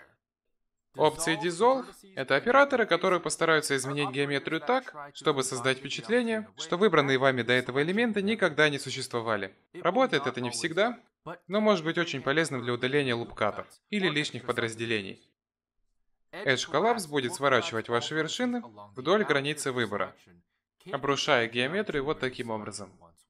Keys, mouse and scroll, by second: 0.6 ctrl+z, 0.8 ctrl+z, 2.8 click, 3.9 click, 4.2 x, 5.3 x, 8.8-9.8 scroll up 5, 9.8 scroll up 1, 9.8 middle click, 11.4 ctrl+z, 13.3 ctrl+r, 13.3 x, 14.5 middle click, 15.2 x, 18.5 scroll down 1, 19.5 click, 20.1 shift+click, 20.6 middle click, 21.2 x.